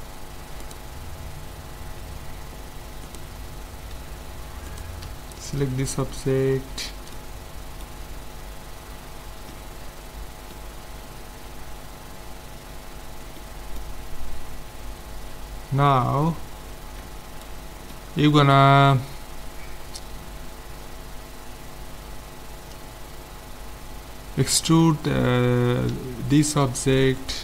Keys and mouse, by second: 2.3 middle click, 3.1-6.5 right drag, 7.8 z, 21.3-22.3 middle drag, 25.9 middle click, 25.9 z, 26.3-27.4 right drag.